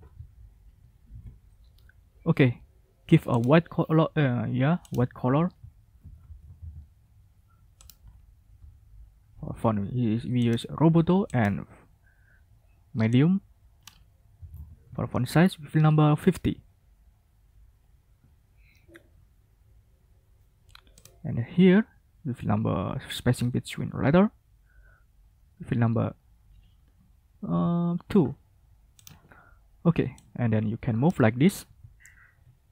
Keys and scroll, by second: 1.0 ctrl+a, 5.0 ctrl+a, 5.9-6.5 typing, 14.3 typing, 14.8 Return, 23.1 ctrl+a, 27.2 typing, 27.4 Return, 32.0 ctrl+shift+a.